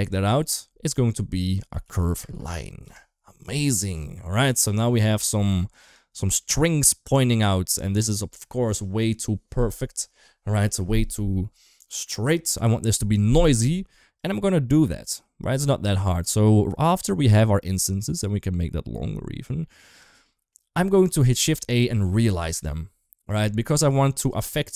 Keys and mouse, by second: 4.2-4.7 middle drag, 5.1 shift+middle drag, 5.7 click, 6.2 middle click, 7.6 middle click, 14.0 click, 14.2 click, 15.1 click, 16.1-16.5 drag, 17.4-20.0 shift+drag, 20.0 shift+middle click, 20.9 shift+a, 23.5 g, 24.5 shift+middle click.